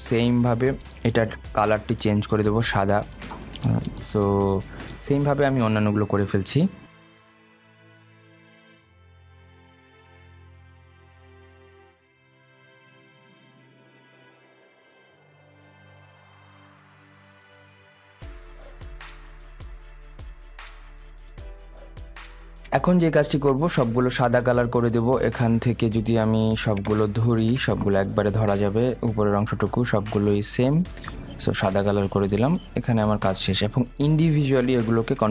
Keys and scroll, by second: 8.6 Delete, 15.9 ctrl+z, 16.9 Escape, 18.3 Delete, 19.0 ctrl+z, 20.1 Delete.